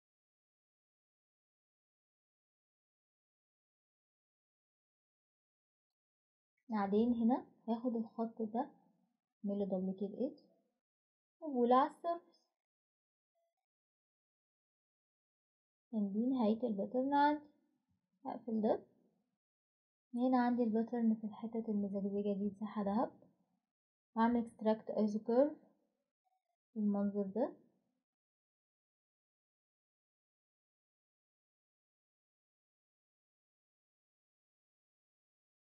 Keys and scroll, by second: 5.9 typing.